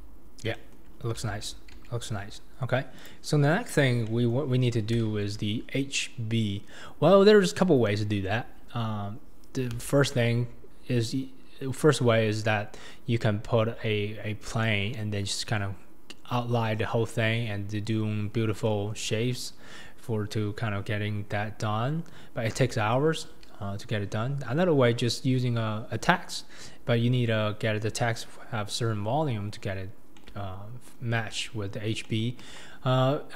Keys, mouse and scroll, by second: 0.5-0.9 shift+middle drag, 0.9-1.3 scroll down 3, 1.3 alt+z, 1.7 alt+z, 2.5-3.0 scroll up 2, 3.0 click, 3.5-4.0 scroll down 2, 4.0 shift+scroll up 1, 4.1-4.5 shift+middle drag, 4.5-5.1 shift+scroll down 4, 5.1 alt+z, 7.2-9.5 scroll up 3, 12.1-14.5 scroll up 2, 18.3-18.7 scroll down 2, 18.7-19.2 shift+middle drag, 19.2-20.2 scroll up 3, 20.2-22.3 scroll up 2, 22.3-22.7 scroll down 2, 22.7-24.2 shift+middle drag, 24.2-24.7 scroll up 1, 24.7-26.2 scroll up 1, 26.2-28.0 scroll down 1, 28.0-29.7 scroll up 2, 29.7-30.2 scroll up 1, 30.2-32.4 middle drag, 32.4 KP_1.